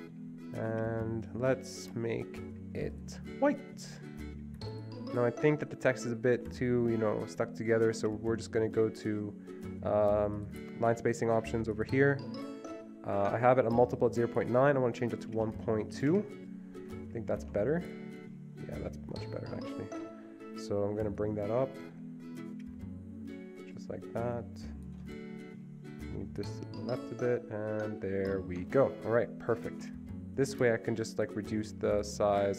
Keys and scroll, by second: 15.2-16.5 typing, 30.7 Escape.